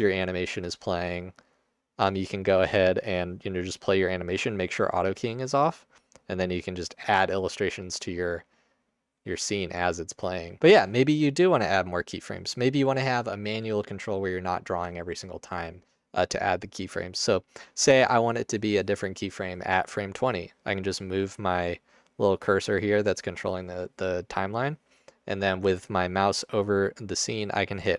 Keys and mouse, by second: 9.0 middle click, 10.2 alt+shift+middle click, 10.7-11.1 drag, 10.7 space, 12.3-13.0 drag, 16.1-17.3 drag, 17.8-18.8 drag, 21.3-23.3 drag.